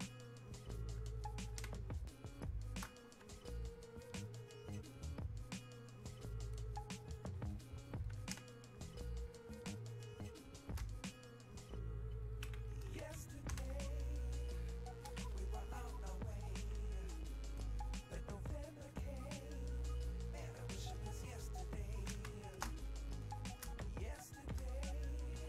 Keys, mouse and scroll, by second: 1.6 space, 6.3 click, 8.4 space, 9.5 click, 9.7 space, 11.6 click, 13.6 space, 14.1 click, 14.4 space, 16.0-22.3 alt+drag, 22.3 space, 22.9-25.4 shift+drag.